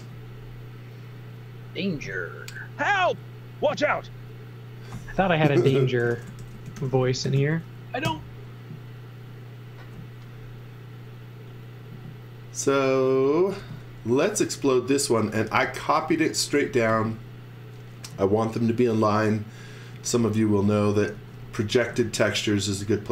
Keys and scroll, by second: 5.8-7.8 typing, 8.0 Return, 13.3-15.8 typing, 16.9 space, 19.6-21.9 typing.